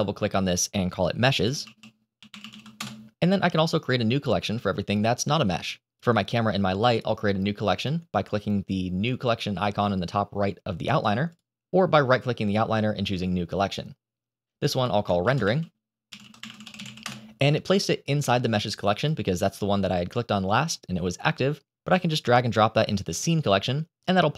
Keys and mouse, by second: 5.4-5.8 shift+middle drag, 11.9-13.9 drag, 14.5 click, 14.6 click, 15.0-16.9 shift+middle drag.